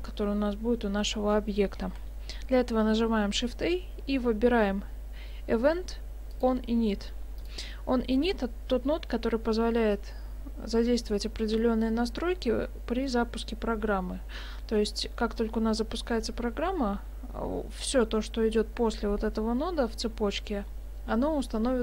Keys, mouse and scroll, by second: 2.0 shift+a, 14.8 middle click.